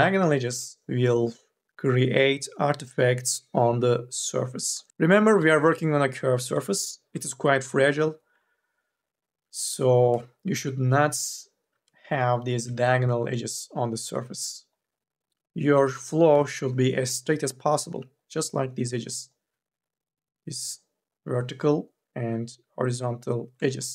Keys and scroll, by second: 9.8 2, 9.9 e, 16.0 2, 16.6 e.